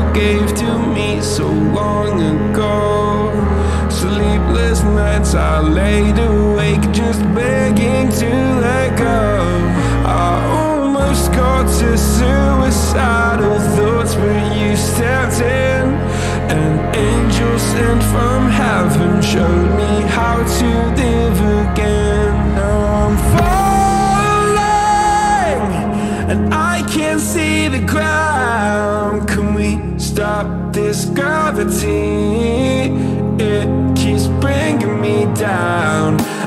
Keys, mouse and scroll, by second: 1.5-1.9 drag, 1.9-2.6 shift+middle drag, 2.6 scroll down 1, 2.8-10.3 middle drag, 25.7-30.1 drag.